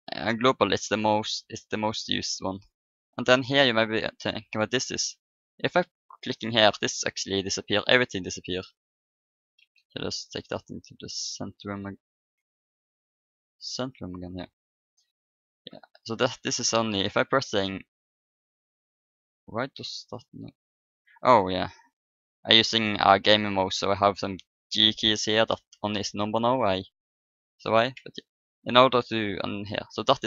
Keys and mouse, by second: 0.2-2.1 drag, 6.2-8.5 drag, 7.4-10.1 middle drag, 9.6 shift+s, 12.1 shift+s, 14.4-16.5 middle drag, 16.9-20.0 typing, 21.5-25.1 typing, 26.8 middle click, 27.7 click, 27.9 1.